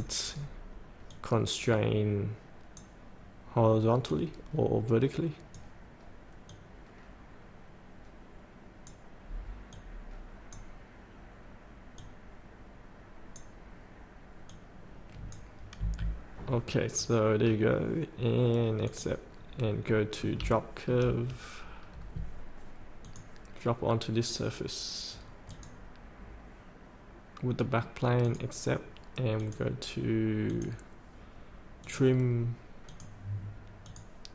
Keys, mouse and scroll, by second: 15.8 F8, 16.4-16.8 scroll up 1, 16.8 scroll down 1, 17.4 scroll up 1, 18.8 click, 19.3 scroll up 1, 19.8 middle click, 20.6 shift+middle click, 21.3 scroll down 1, 23.0-31.6 drag.